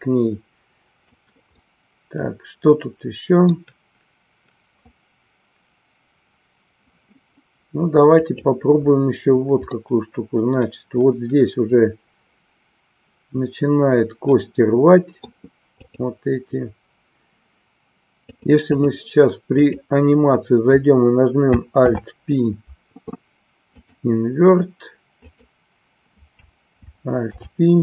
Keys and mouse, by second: 1.5-3.7 middle drag, 8.3 click, 9.9-15.4 middle drag, 15.8 click, 18.4 click, 25.3 click.